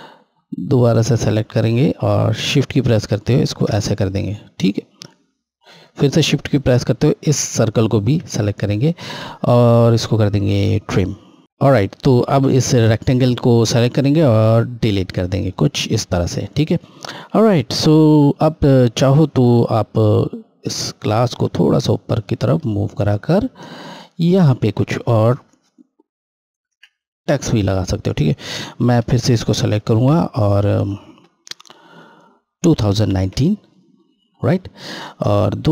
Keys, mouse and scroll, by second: 2.3 shift+click, 6.5 shift+Left, 7.9 shift+Left, 10.9 click, 12.6 click, 14.2 Delete, 20.8 click, 20.9 click, 24.3 ctrl+Left, 26.5 ctrl+Right, 27.4 scroll, 28.8 F8, 29.9 ctrl+a, 35.2 click.